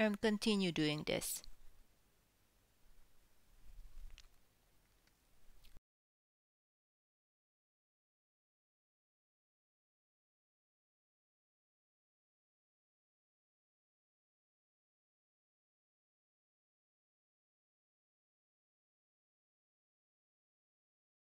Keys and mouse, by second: 0.3 2, 0.6 e, 1.8 1, 2.2 e, 2.8 e, 3.2 ctrl+click, 4.0 f, 4.6 ctrl+z, 5.4 Tab, 5.6 Tab, 5.7 Tab, 6.2 KP_1, 6.4 Tab, 7.0 shift+drag, 7.3-7.6 shift+drag, 7.6-21.2 typing, 8.8 click, 12.2 click, 12.9 click, 13.8 shift+drag, 13.9 shift+click, 14.2 click, 15.1 shift+click, 16.2 shift+drag, 16.4-17.0 ctrl+middle drag, 16.6 ctrl+x, 16.8 ctrl+z, 17.0 click, 17.1-20.7 middle drag, 18.0 shift+drag, 19.4 click, 20.6 ctrl+click, 20.8 ctrl+z, 20.8 middle drag, 21.1 drag.